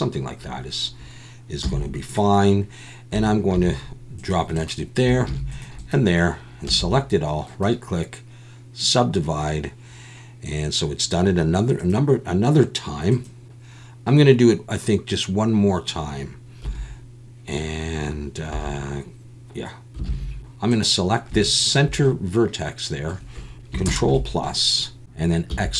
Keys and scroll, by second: 1.6 z, 3.5 ctrl+r, 5.3 ctrl+r, 8.4 a, 16.6 1, 18.5 1, 19.7 F1, 20.1 alt+a, 23.8 ctrl+KP_Add.